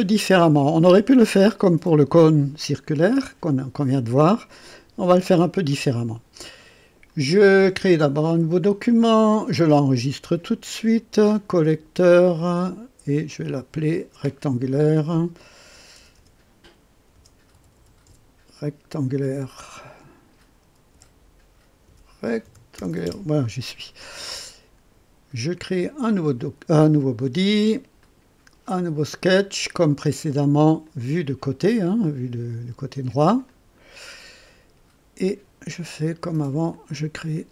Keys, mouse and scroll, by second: 8.5 click, 10.0 ctrl+s, 11.3 click, 13.3 click, 15.6 Delete, 15.9-19.2 typing, 20.6 BackSpace, 21.0 t, 22.2 BackSpace, 22.4 c, 22.7 t, 23.1 Return, 26.0 click, 28.0 click, 30.8 click, 33.4 click, 36.7 click.